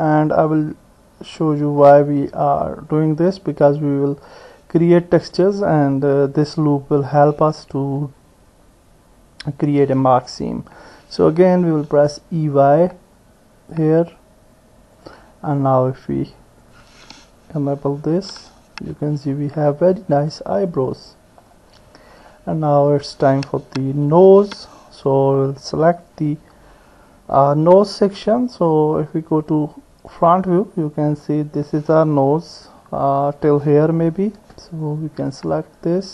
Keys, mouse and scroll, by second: 11.1 e, 18.2 Tab, 19.0 middle click, 20.7 middle click, 22.4 middle click, 24.3 Tab, 25.9 click, 28.0 KP_1, 30.1 click, 33.2 click, 34.7 ctrl+click.